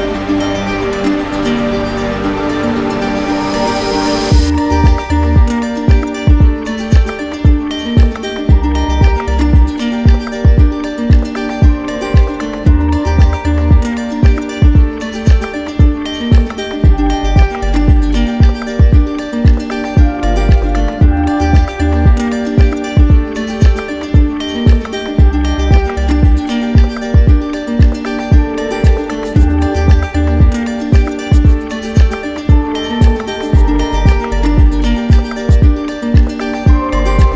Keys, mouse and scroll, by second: 1.3 click, 1.9 click, 3.2 click, 4.3 click, 5.7 click, 6.1 shift+click, 6.2 shift+click, 7.5 ctrl+click, 8.9 click, 9.5 ctrl+click, 11.3 e, 15.6 alt+click, 21.5 click, 22.1 click, 22.5 q, 23.6 click, 25.4 right click, 26.6 click, 30.4 click, 33.8 right click, 36.4 right click, 37.0 alt+click.